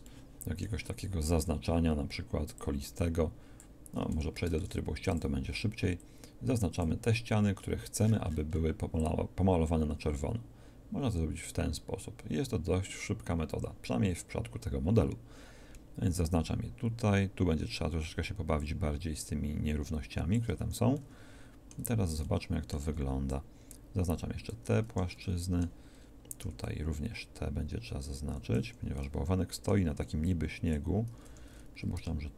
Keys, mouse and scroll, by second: 0.0 shift+middle click, 1.2 c, 4.5 ctrl+Tab, 5.5 c, 21.7 z, 22.9 c, 26.4 c, 30.1 c.